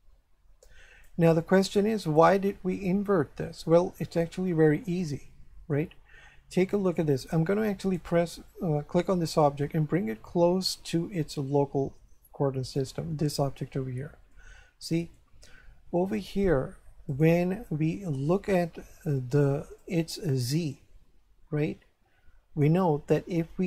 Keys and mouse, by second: 2.2 right click, 5.0 shift+middle click, 6.6 shift+middle click, 7.8 right click, 9.3 g, 12.6 click, 14.3 shift+middle click, 17.1 click, 19.8 click.